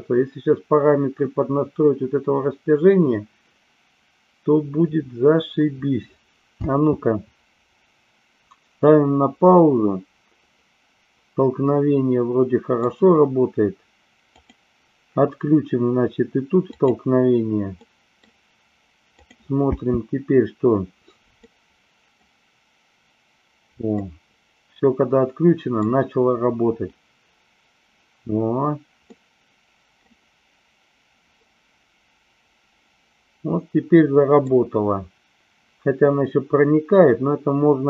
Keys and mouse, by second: 7.1 space, 9.6-12.8 middle drag, 14.3 click, 16.7 click, 17.7-18.2 middle drag, 19.1 click, 19.7 space, 21.5-22.1 middle drag, 23.9-25.7 middle drag, 29.1-29.9 middle drag, 31.3-34.3 middle drag.